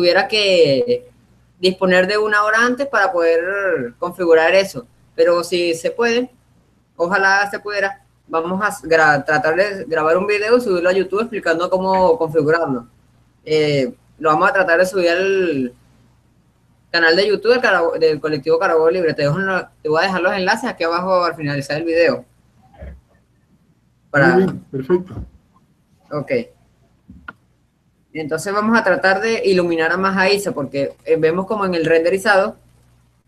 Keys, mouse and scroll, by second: 0.9-5.7 middle drag, 6.6-9.9 middle drag, 12.2 r, 18.9-20.5 drag, 24.1-27.8 middle drag, 27.8-29.3 drag, 30.1-32.9 middle drag.